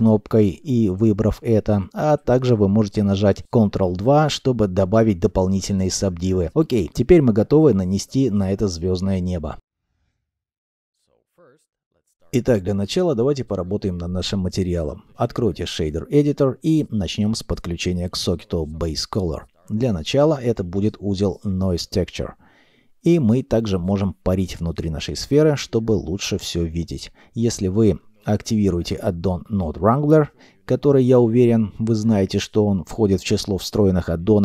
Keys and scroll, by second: 2.1 ctrl+2, 19.5 shift+a, 20.3 n, 20.6 o, 20.8 i, 30.1 w, 30.2 r, 30.3 a.